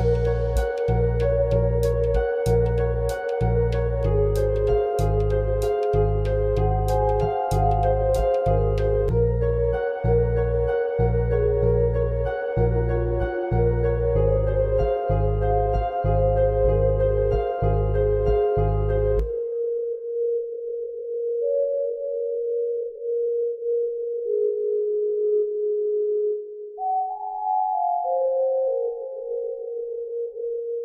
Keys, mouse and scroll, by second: 1.3 click, 1.5 g, 4.3 click, 4.6 g, 6.0 click, 6.3 g, 8.0 click, 8.1 g, 9.3 click, 9.4 g, 10.2 click, 10.3 g, 11.1-11.6 scroll down 1, 11.6 scroll down 1, 11.7 click, 11.9-12.3 scroll up 1, 12.3 click, 12.5 g, 13.7 click, 13.9 g, 15.3 click, 15.9 click, 16.1 g, 17.1 click, 17.3 g, 18.3 click, 19.0 click, 19.1 g, 19.9 click, 20.1 g, 21.9 click, 23.3 click, 23.5 g, 25.6 click, 25.9 g, 26.9 click, 27.1 g, 28.8 click, 29.5 click, 29.7 g.